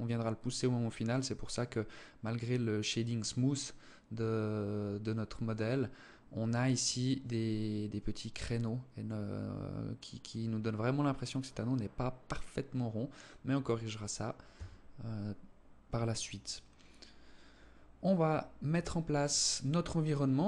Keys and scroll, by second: 13.9 Escape.